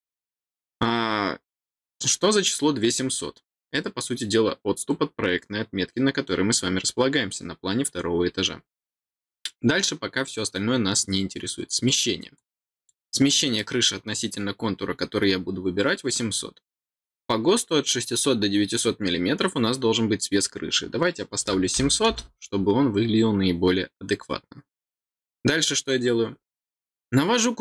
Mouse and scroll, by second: 12.3 click, 25.1 middle click.